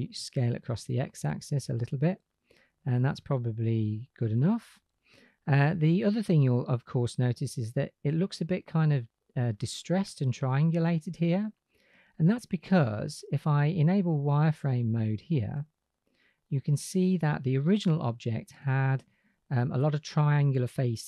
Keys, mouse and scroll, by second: 0.1-2.8 drag, 5.2-5.6 shift+drag, 14.3-16.2 drag, 17.5 click.